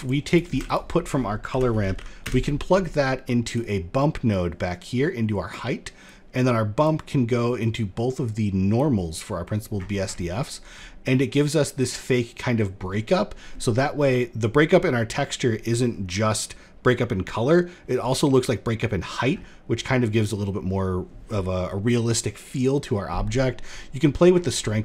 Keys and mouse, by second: 0.0 shift+a, 3.8-5.0 drag, 5.6-6.4 drag, 7.1-8.3 drag, 24.1 middle click.